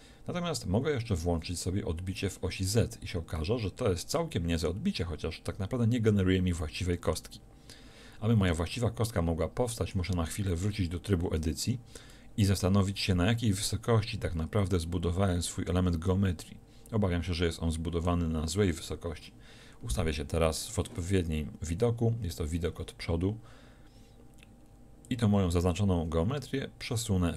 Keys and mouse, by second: 1.2 middle click, 4.0-8.9 middle drag, 10.4 Tab, 11.2 a, 11.4 a, 11.9 a, 15.4 middle click, 19.1 KP_1, 22.6-25.0 middle drag.